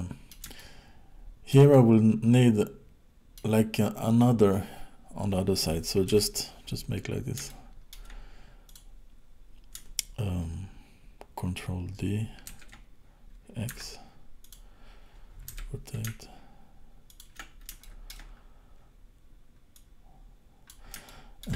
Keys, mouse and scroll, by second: 0.6 shift+middle click, 1.7 middle click, 6.1 KP_7, 7.0 scroll up 4, 7.4 shift+middle click, 8.7 click, 12.5 shift+d, 15.5 r, 17.8 shift+middle click, 18.3 scroll up 3, 19.7 click, 21.1 shift+middle click.